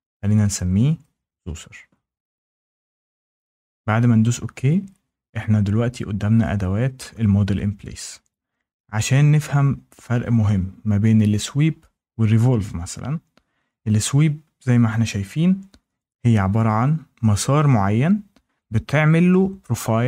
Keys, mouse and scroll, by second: 0.0-1.1 typing, 2.4 click, 7.1 click.